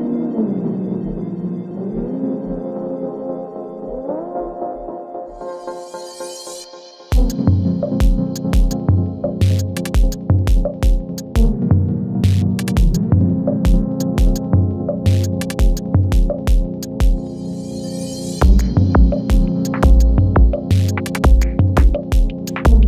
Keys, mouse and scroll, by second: 0.4 click, 0.8 space, 4.8 space, 5.3 click, 7.0 ctrl+shift+c, 7.6 Return, 8.8 right click, 9.7 click, 12.0 Return, 12.7 click, 13.0 space, 16.9 space, 17.3 click, 17.7 space, 21.0 space, 21.7 n, 21.8 space.